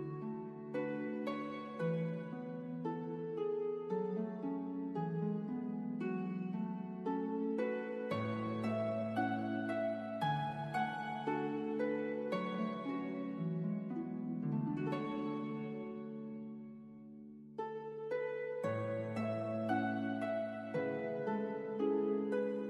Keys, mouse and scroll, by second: 0.2 right click, 1.9 click, 3.9 KP_1, 4.5 KP_Enter, 5.8 click, 6.3 right click, 11.4 click, 14.3 KP_1, 14.8 KP_Enter.